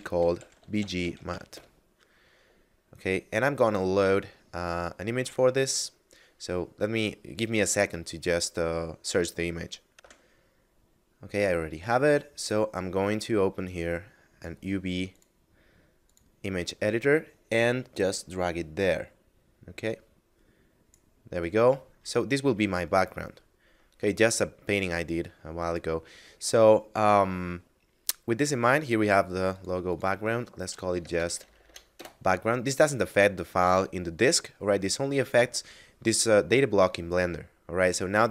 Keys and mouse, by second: 0.8 m, 0.9 a, 1.2 t, 1.4 Return, 9.9 F9, 13.3 click, 17.9 click, 21.3 middle click, 29.1 click, 30.5 BackSpace, 31.7 Return, 36.7 middle click.